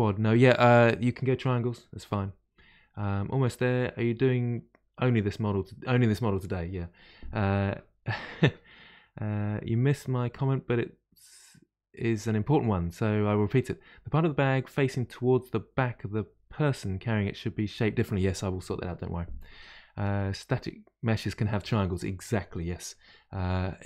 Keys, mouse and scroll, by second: 0.3-3.4 middle drag.